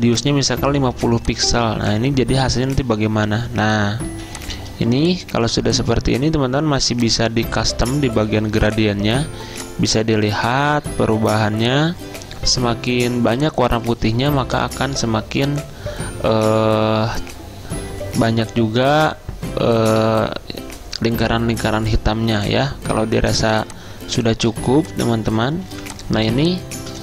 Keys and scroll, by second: 4.2 z.